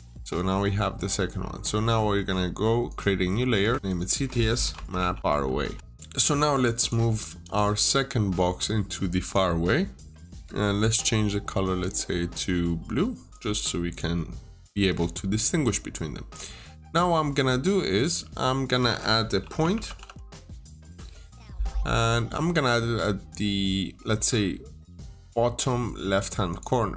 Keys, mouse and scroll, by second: 0.4 scroll up 1, 2.7 click, 3.7 click, 4.3-5.7 typing, 5.7 middle click, 6.4 click, 6.6 double click, 7.3 click, 14.6 Escape, 15.8 scroll down 1, 16.2-16.8 scroll up 1, 17.8 middle click, 19.3-20.7 typing, 24.9 click, 25.6 middle click, 26.3 click.